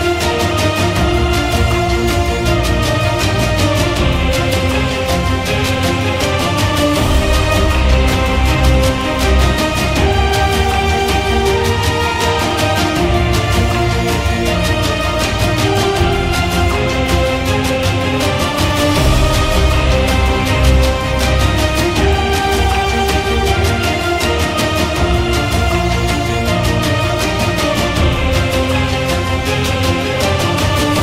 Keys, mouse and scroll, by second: 3.3 click, 3.4 click, 5.0 click, 16.3 ctrl+i.